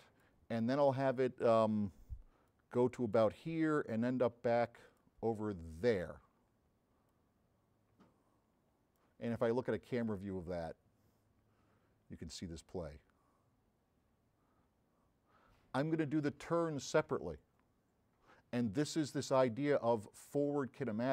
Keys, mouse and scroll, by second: 2.5 click, 3.8-5.1 drag, 5.9 click, 7.1-8.7 drag, 10.0 click, 10.7 middle click, 12.4 click, 20.5 click.